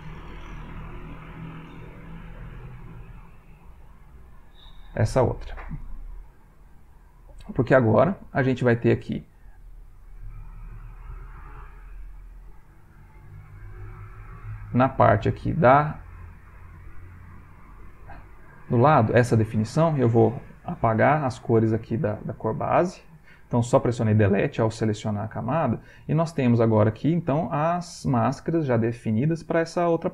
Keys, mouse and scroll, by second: 0.3 click, 1.5 click, 2.3 click, 3.3 click, 3.9 click, 6.5 click, 9.6 click, 11.3 click, 15.8 click, 16.8 click, 17.9 click, 19.6 click, 20.8 Delete, 25.5 middle click.